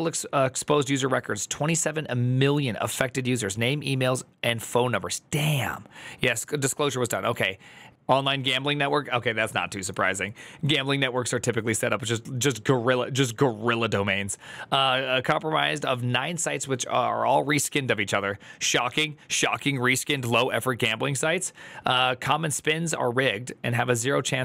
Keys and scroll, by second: 4.6 alt+[, 7.8 alt++.